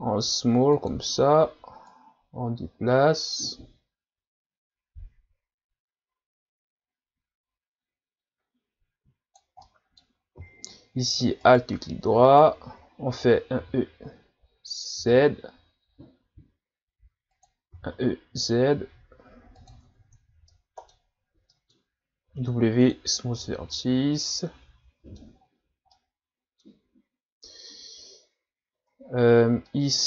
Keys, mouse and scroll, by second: 1.9 click, 9.6 scroll up 1, 9.6-11.4 middle drag, 11.4 alt+right click, 12.3 alt+right click, 13.7 e, 17.9 e, 19.8 Tab, 20.2-20.5 scroll down 1, 20.5 middle click, 21.1-21.5 scroll up 1, 21.5 middle click, 22.3 w, 23.3 scroll down 1, 23.7-25.4 middle drag, 25.4-25.9 scroll up 3, 25.9-28.7 middle drag, 28.7 Tab, 29.1-29.7 scroll down 1, 29.7 middle click.